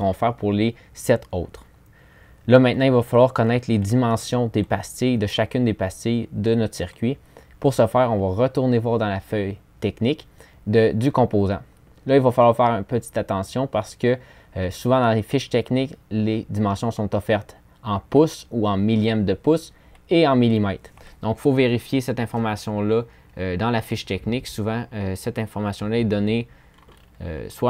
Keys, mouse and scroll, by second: 26.5-27.5 scroll up 4.